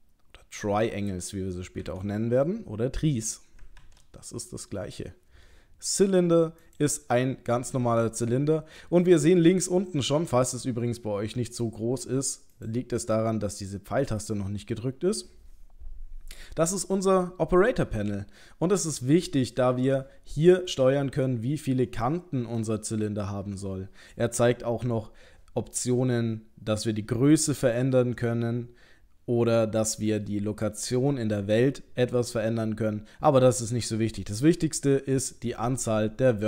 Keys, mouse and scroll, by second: 1.8 Delete, 3.8 shift+a, 12.6 click, 14.2 click.